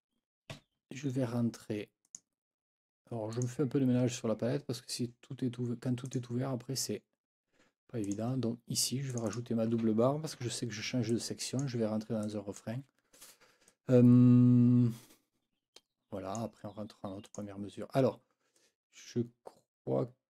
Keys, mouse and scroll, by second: 0.5 F9, 2.0 click, 3.3 click, 6.0 click, 8.0 click, 9.1 click, 10.4 Escape, 11.1 click, 12.2 click, 13.7-16.6 drag, 17.2 click, 18.6 click.